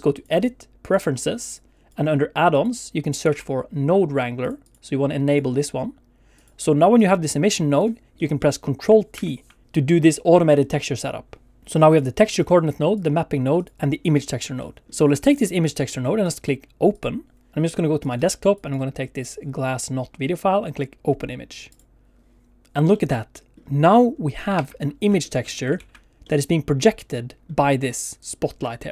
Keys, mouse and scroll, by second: 0.1 click, 6.9 click, 8.2 middle click, 9.1 ctrl+t, 9.9 middle click, 10.9 click, 11.9 click, 12.9 click, 13.6 click, 14.6 middle click, 15.1 click, 15.8 middle click, 16.2 click, 16.9 click, 22.9 middle click, 24.0-24.4 scroll up 2.